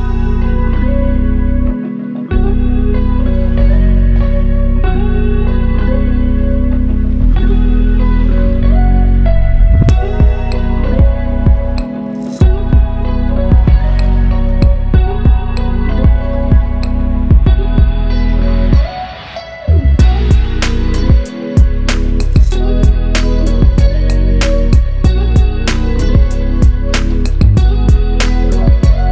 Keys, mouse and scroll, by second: 1.2 right click, 2.1-3.6 drag, 7.0-8.0 drag, 11.9 ctrl+z, 13.2 ctrl+z, 14.1 ctrl+shift+z, 14.5 ctrl+click, 14.8 click, 15.0 right click, 15.6 click, 17.0 right click, 17.7 click, 18.8 right click, 19.3 click, 21.5 right click, 21.9 click, 23.1 right click, 23.6 click, 26.2 ctrl+Page_Down, 27.9 ctrl+Page_Up, 28.6 click.